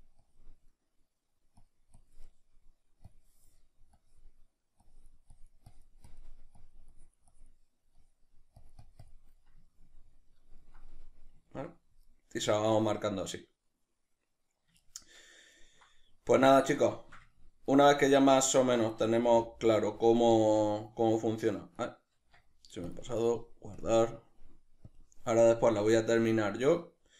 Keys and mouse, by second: 0.7 middle click, 1.7-9.4 drag, 9.4-20.7 ctrl+middle drag, 18.8 Tab, 20.7 z, 21.8-22.9 right drag, 22.9 Tab, 25.8 click, 26.4-27.1 shift+middle drag.